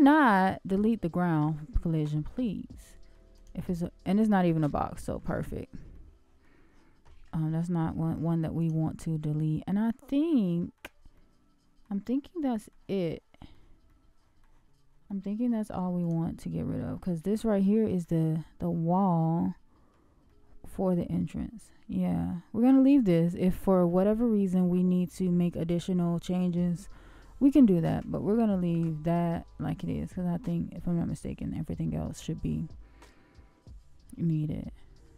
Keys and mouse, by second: 1.2-1.9 middle drag, 2.8-3.1 middle drag, 4.8 shift+middle click, 5.9 shift+middle click, 7.3 shift+middle click, 9.3-9.9 middle drag, 10.3-10.7 middle drag, 11.1-11.8 shift+middle drag, 12.2-12.7 shift+middle drag, 13.0 shift+middle click, 13.8-14.4 shift+middle drag, 15.0-15.5 middle drag, 16.5-17.1 middle drag, 18.6-19.9 middle drag, 20.2-22.3 middle drag, 23.9-25.3 middle drag, 27.2 shift+middle click, 35.0-35.1 middle drag.